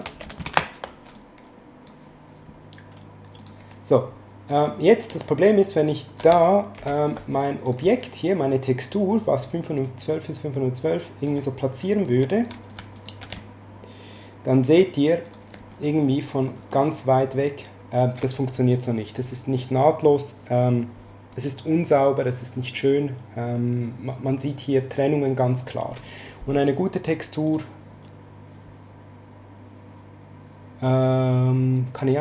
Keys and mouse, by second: 1.1 click, 3.4 click, 5.1 ctrl+click, 6.8 ctrl+z, 7.3 click, 9.8 ctrl+click, 12.7 click, 12.9 shift+click, 13.3 ctrl+click, 15.2 click, 27.5 click.